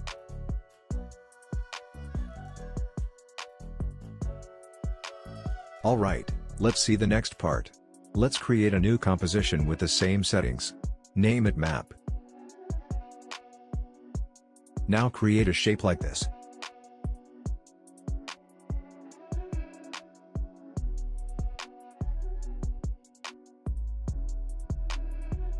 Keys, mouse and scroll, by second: 0.3-1.7 drag, 1.7 scroll up 1, 2.8 click, 7.4 click, 9.9-10.4 typing, 13.0 Return, 14.6-19.2 drag, 19.9-25.5 drag.